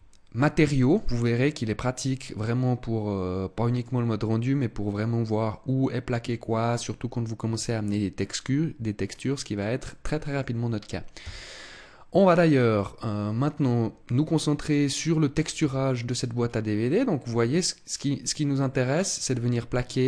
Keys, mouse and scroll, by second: 1.1 middle click, 4.1-4.6 scroll up 1, 9.1 middle click, 9.8 middle click, 11.1 Tab, 12.7 middle click, 15.5 a, 16.3-16.8 scroll up 2, 16.8 middle click, 16.8 scroll up 1, 18.6 middle click.